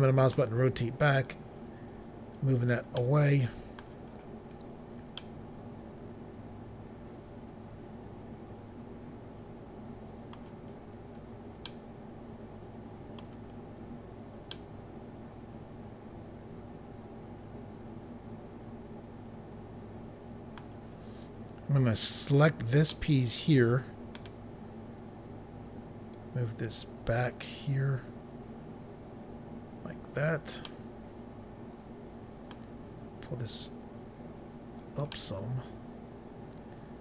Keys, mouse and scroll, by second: 1.2 click, 3.0 middle click, 3.6 scroll up 1, 4.1-4.5 scroll up 2, 5.2 middle click, 10.7-11.3 scroll down 3, 11.7 middle click, 13.5 scroll down 1, 14.4 scroll down 1, 14.5 middle click, 22.2 click, 22.9 middle click, 26.2 click, 30.7 middle click, 33.7 click, 35.2 middle click.